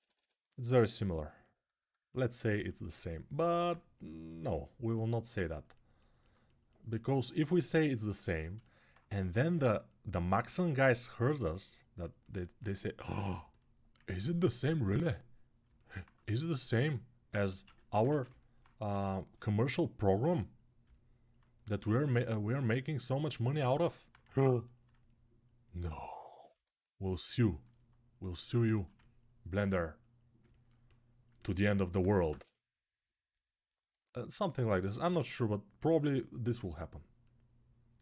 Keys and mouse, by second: 2.1-13.8 right drag, 13.8 ctrl+click, 13.9 alt+right click, 14.1 alt+click, 14.2 alt+right click, 17.3 ctrl+z, 26.6-31.0 alt+drag, 32.1 ctrl+space, 36.3-38.0 drag.